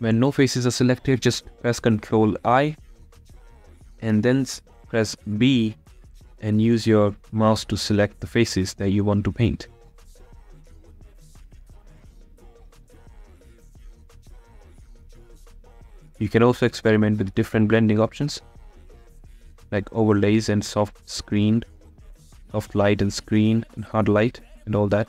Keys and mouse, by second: 0.6 b, 1.7 b, 7.1 b, 9.7 b, 10.7 b, 11.8 b, 12.8 b, 16.8 b, 17.9 b, 19.3 click, 20.0 b, 24.3-25.0 drag.